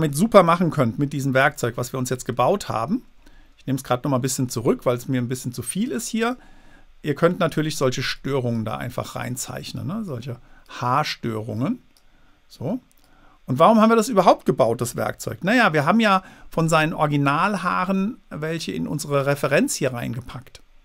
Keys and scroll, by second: 1.2 super+z, 15.2 super+z.